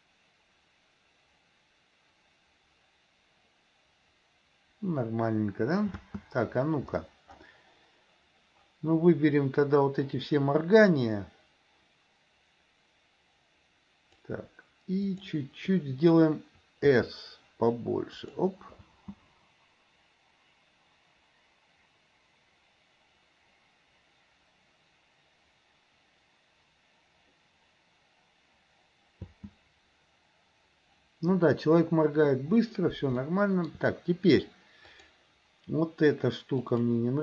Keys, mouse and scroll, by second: 6.0 space, 10.2-14.3 drag, 15.2 click, 16.9 s, 18.9 space, 29.3 space, 33.2 shift+middle click, 35.0 click, 36.8 click.